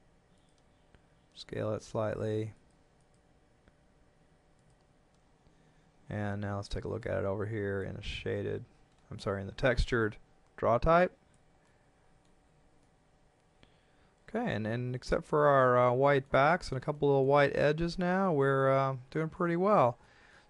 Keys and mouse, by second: 0.4 click, 1.2 s, 2.5 click, 6.9 click, 9.7 click, 11.7 middle click, 12.3 Tab, 13.3 middle click, 15.9 middle click, 17.9 shift+middle click.